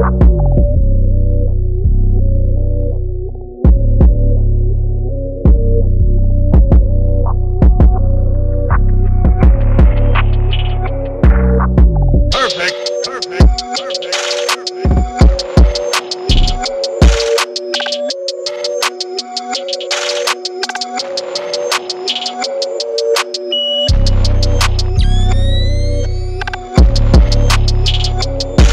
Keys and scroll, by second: 0.0-13.5 typing, 14.1 super+-, 14.4 super+-, 14.4 super+1, 14.7 super+0, 14.9 super+-, 15.1 super+0, 17.0 super+a, 17.0 super+c, 17.1 super+d, 17.1 super+w, 17.6 super+v, 18.7 super+1, 18.9 i, 20.9 super+t, 21.4 Return, 22.2 super+0, 22.2 super+-, 22.4 super+-, 22.4 shift+Page_Down, 22.6 super+a, 22.8 super+d, 22.9 super+1, 22.9 super+t, 23.4 Return, 26.6 shift+super+u, 27.0 super+0, 27.2 super+1, 27.3 super+=.